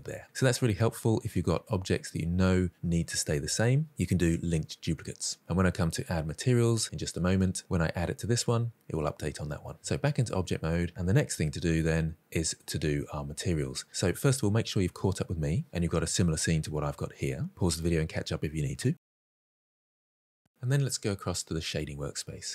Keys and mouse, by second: 0.0 middle click, 9.8 Tab, 10.4-11.1 middle drag, 11.4-11.7 ctrl+middle drag, 11.8-12.6 shift+middle drag.